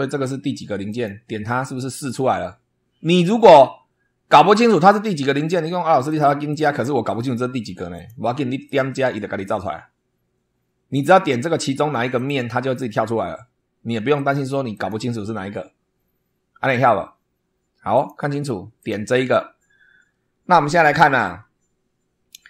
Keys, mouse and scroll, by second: 0.8 click, 3.2 click, 6.0 click, 6.4 click, 7.9 click, 8.6 click, 10.9 click, 12.1 click, 14.1 click, 14.7 click, 17.9 click, 18.7 click.